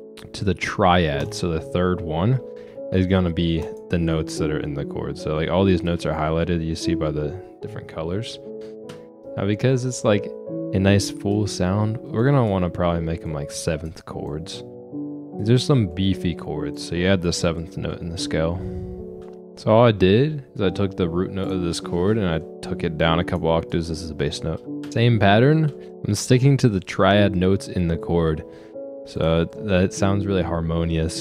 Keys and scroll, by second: 8.9 ctrl+space, 18.1 ctrl+space, 24.8 space, 25.6 space.